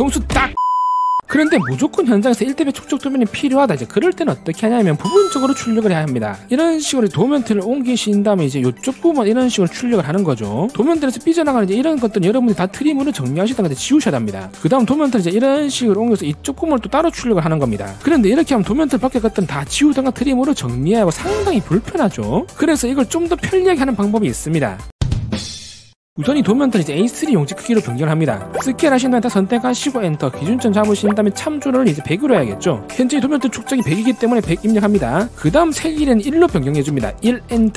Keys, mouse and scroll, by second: 6.8 click, 9.0 click, 9.4 scroll up 1, 10.0 middle click, 11.7 scroll up 1, 12.0 middle click, 15.0 right click, 15.5 right click, 16.7 right click, 17.1 scroll up 1, 17.5 scroll down 1, 17.7 middle click, 28.7 c, 28.8 right click, 29.2 click, 29.9 click, 30.4 right click, 31.5 click, 32.6 r, 37.5 1.